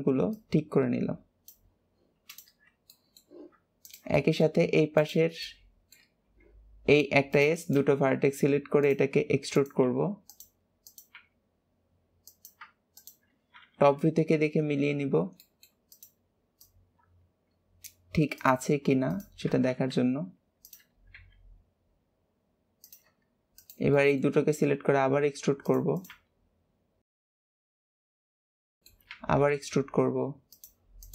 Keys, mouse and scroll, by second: 0.2 click, 1.7-2.0 scroll down 4, 2.2 click, 2.8 shift+middle click, 3.7 click, 4.1 shift+middle click, 4.9 shift+click, 5.4 shift+middle click, 6.2 e, 7.5 click, 9.5 click, 10.8 click, 12.9 shift+click, 13.7 KP_7, 14.7-15.3 scroll up 2, 15.3 shift+middle click, 15.9 click, 16.5 click, 18.3 click, 19.0 click, 19.6 alt+z, 20.5 click, 21.1 g, 23.5 shift+click, 23.9 shift+middle click, 24.4 e, 25.9 click, 26.1 g, 27.2 shift+middle click, 27.3 scroll up 4, 27.5 click, 27.6 g, 28.1 click, 28.2 g, 28.8 shift+middle click, 29.0 e, 31.0 click.